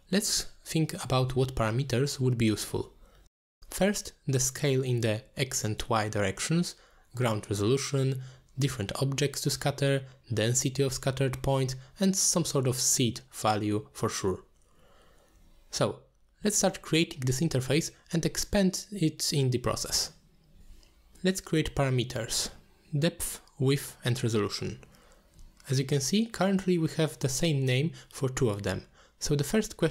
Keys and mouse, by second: 0.9 click, 3.7 middle click, 4.6 middle click, 5.7 click, 7.2 middle click, 8.1 middle click, 8.9 middle click, 11.9 middle click, 12.9 middle click, 15.0 middle click, 16.1 middle click, 18.9-20.0 drag, 20.8-21.9 drag, 22.7 middle click, 23.6-24.7 drag.